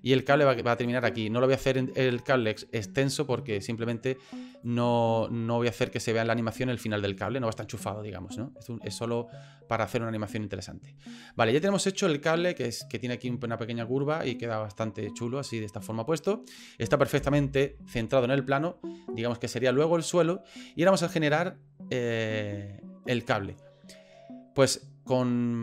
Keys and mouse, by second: 1.3-2.6 right drag, 3.2 right click, 4.5 right click, 5.2-6.9 right drag, 7.2 right click, 14.1-16.5 middle drag, 17.2 KP_1, 20.9 middle click.